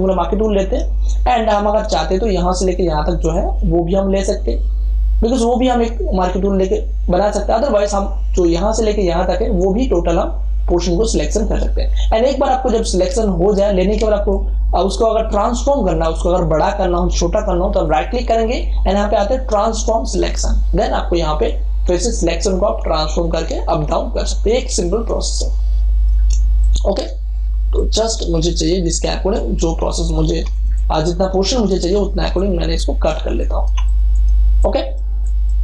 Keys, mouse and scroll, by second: 0.8 space, 1.0-13.3 ctrl+drag, 17.9 right click, 20.1-26.3 drag, 26.3 space, 26.5 ctrl+click, 28.7 space, 28.9-33.1 ctrl+drag, 33.1 space, 33.3-35.6 ctrl+drag.